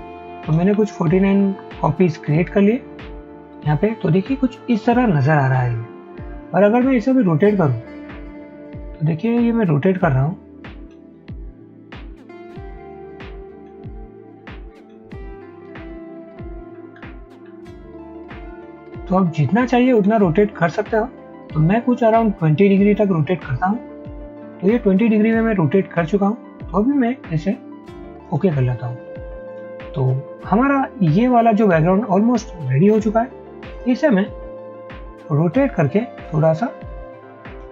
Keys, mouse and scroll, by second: 0.2-0.9 typing, 0.7 scroll up 1, 1.4 scroll up 1, 1.5 Up, 1.7 Up, 2.3 Up, 9.0-10.5 scroll up 1, 10.5-10.9 scroll down 1, 10.9-11.7 scroll up 1, 15.5-17.0 scroll down 1, 18.9-21.8 scroll up 1, 21.8-22.3 scroll down 1.